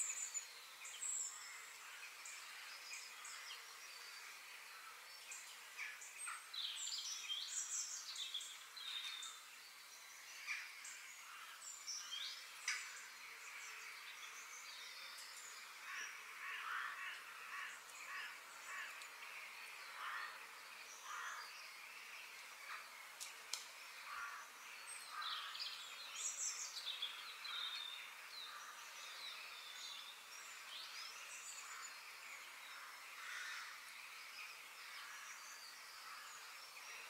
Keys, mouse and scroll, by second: 0.6-4.3 middle drag, 9.5-11.4 middle drag, 12.2 middle click, 13.2 KP_3, 13.6-14.1 scroll down 1, 14.1 shift+middle click, 14.8 click, 15.2 g, 19.5 middle click, 20.1 click, 20.5 middle click, 20.8 f, 23.0 middle click, 23.7 KP_7, 29.9-33.0 middle drag, 33.8-35.0 middle drag, 35.0 scroll down 1, 35.1-37.0 middle drag.